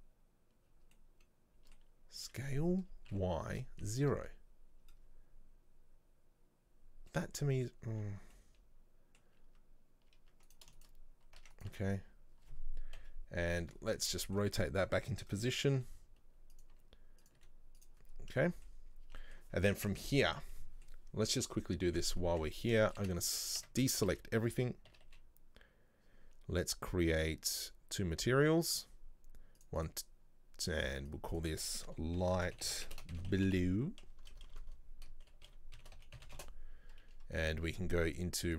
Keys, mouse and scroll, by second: 0.7-1.1 scroll down 1, 1.1-2.3 middle drag, 2.3 s, 4.9-5.5 scroll up 1, 6.8-7.2 scroll down 1, 7.2-9.5 middle drag, 9.5 Tab, 10.2 Tab, 10.6 right click, 10.9 shift+right click, 11.5 Tab, 11.6 right click, 11.8 Tab, 13.1 KP_3, 13.9-14.3 scroll up 2, 14.3-15.4 shift+middle drag, 15.4-15.7 scroll up 1, 15.9 r, 17.9 right click, 18.2 scroll down 4, 18.5 middle click, 19.1-19.6 scroll down 6, 19.2 Tab, 19.3 middle click, 19.6-20.0 scroll up 2, 20.0 scroll down 1, 20.0-21.9 middle drag, 21.9-22.3 scroll down 1, 22.3 Tab, 22.9 shift+middle click, 23.1 a, 23.7 a, 28.9 click, 29.7-30.9 drag, 31.2-34.2 drag, 34.3 BackSpace, 34.4 BackSpace, 38.3 click.